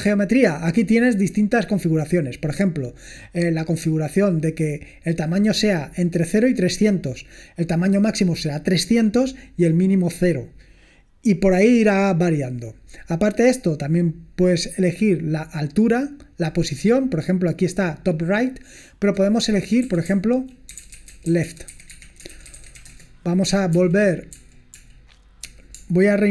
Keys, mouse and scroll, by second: 0.5-1.3 scroll down 2, 1.3-1.6 scroll down 1, 18.5 drag, 19.7-23.3 typing, 23.8 ctrl+p, 24.3 ctrl+p, 24.8 ctrl+p.